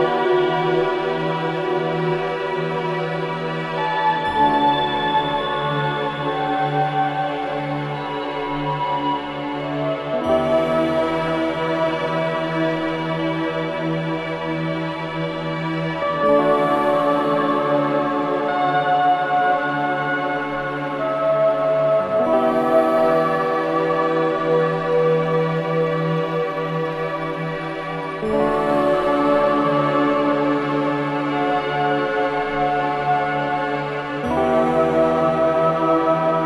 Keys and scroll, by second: 12.3 ctrl+shift+], 12.9 KP_3, 13.5 KP_0, 17.0 v, 20.3 3, 22.0 3, 23.4 KP_2, 25.4 ctrl+alt+3, 25.5 KP_3, 26.6 ], 26.7 ], 27.2 KP_0, 30.4 m, 36.3 v.